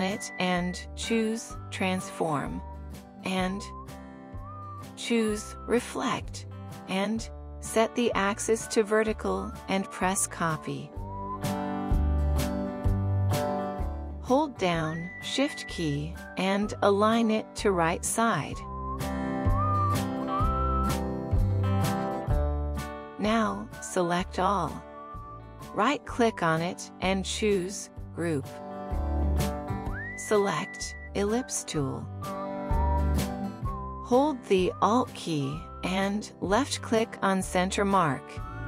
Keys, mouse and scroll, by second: 1.5 right click, 21.7 ctrl+1, 27.4 right click, 31.8 right click, 37.8 alt+click.